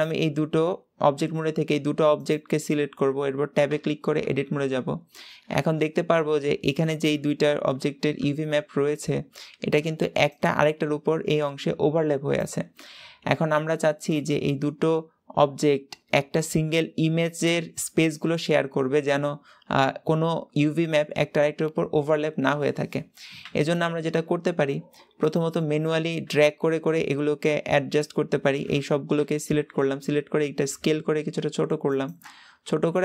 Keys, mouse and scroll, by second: 4.1 Tab, 5.3 a, 25.1 click, 29.0 l, 30.3 s, 32.5 g.